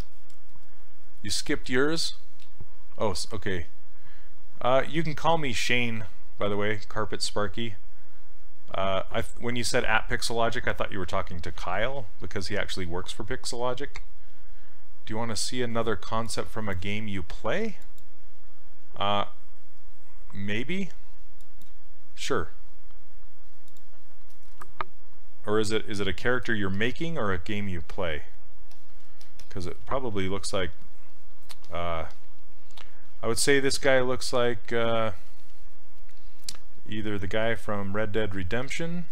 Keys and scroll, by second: 33.6 s, 35.3 s.